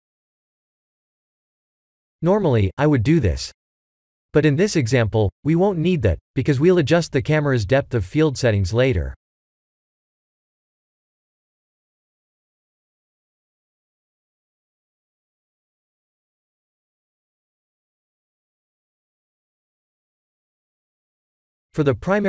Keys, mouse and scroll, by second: 0.7-1.6 scroll down 4, 5.4-6.7 drag, 6.9 middle click, 8.6-9.6 drag, 9.9-11.6 middle drag, 13.6-14.7 drag, 15.4-18.6 middle drag, 19.3-21.1 scroll up 4, 21.1-22.2 drag.